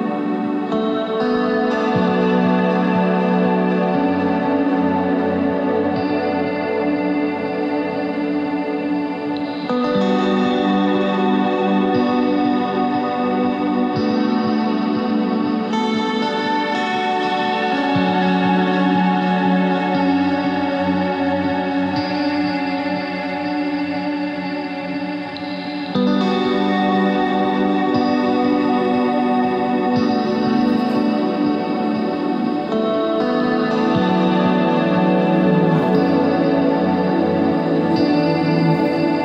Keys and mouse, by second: 0.0 Tab, 0.9 middle click, 2.4 KP_1, 3.2 Tab, 8.1 ctrl+Tab, 9.0 z, 9.2 c, 11.5 c, 13.4 s, 14.2 Tab, 14.3 z, 17.3-18.5 drag, 18.6 middle click, 19.1-20.5 drag, 21.6 middle click, 24.5-26.0 drag, 28.6 middle click, 28.8 KP_1, 30.5 ctrl+z, 33.0 z.